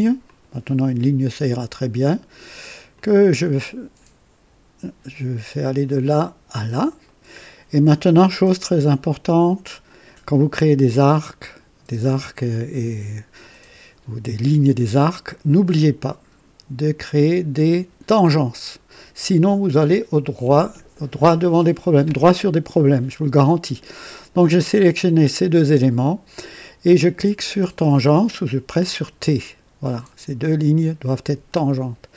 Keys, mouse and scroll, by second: 0.2 click, 2.9 click, 6.0 click, 7.0 right click, 15.4 click, 17.1 click, 29.0 t.